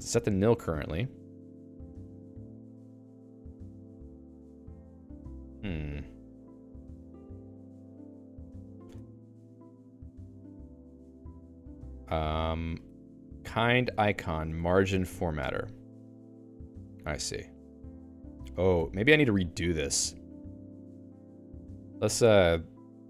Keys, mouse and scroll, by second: 5.1 ctrl+g, 5.7-7.6 typing, 8.3 ctrl+j, 8.5 ctrl+j, 9.1 BackSpace, 10.5 Escape, 10.9 ctrl+s, 11.1-15.4 typing, 18.7-20.7 typing, 19.3 Escape.